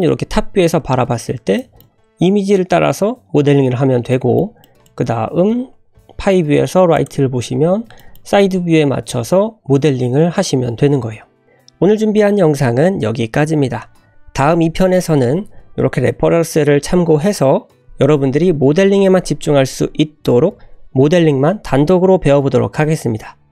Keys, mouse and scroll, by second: 0.1-0.7 scroll down 1, 0.7 n, 1.0 scroll up 2, 1.5 shift+middle click, 1.9 scroll down 1, 4.1 middle click, 4.6 middle drag, 4.8 scroll down 1, 5.9 `, 7.4-7.8 scroll up 3, 7.9 shift+middle click, 8.3-10.6 scroll up 4, 11.1-11.4 scroll down 3, 13.8-14.2 scroll down 3, 14.1 middle click, 14.1 /.